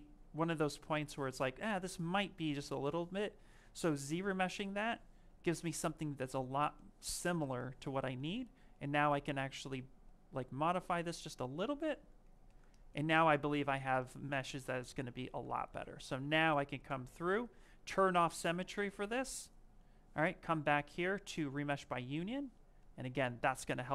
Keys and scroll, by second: 4.2 ctrl+shift+z, 16.7 x.